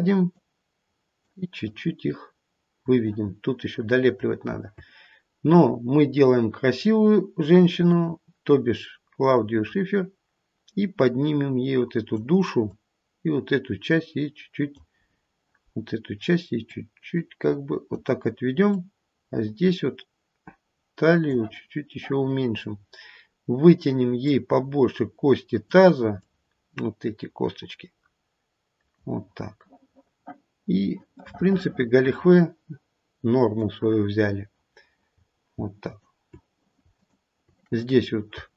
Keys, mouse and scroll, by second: 0.4 click, 1.6 click, 6.0-6.8 scroll down 2, 7.8 click, 12.6 click, 15.0-15.7 scroll up 3, 15.7-16.7 scroll down 1, 16.7 click, 18.7 click, 21.7-22.6 scroll down 2, 22.6-23.2 scroll up 1, 23.2-24.2 scroll up 3, 24.2 click, 26.2 click, 29.3-30.0 scroll down 1, 30.0-31.2 scroll down 3, 31.2 middle click, 33.5 middle click, 34.1-35.1 scroll down 2, 35.1-35.5 scroll up 3, 35.8 shift+click, 36.9 shift+click, 37.9-38.2 scroll up 1.